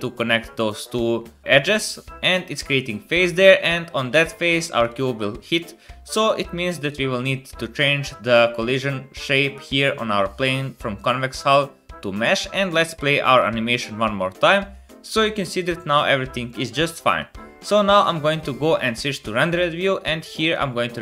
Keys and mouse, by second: 4.9-6.2 drag, 6.9-10.9 drag, 13.7 space, 17.2 space, 19.1-20.2 middle drag.